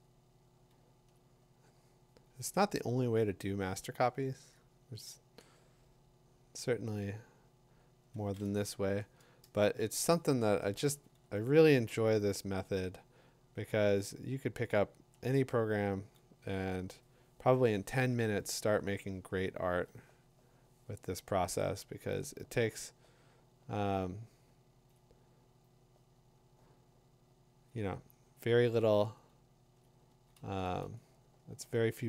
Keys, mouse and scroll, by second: 1.1 click, 3.0 click, 4.1 click, 4.6 click, 9.5 click, 12.5 click, 14.7 click, 15.1 click, 19.4 click, 19.8 click, 21.8 click, 22.2 click, 25.0 click, 29.8 click.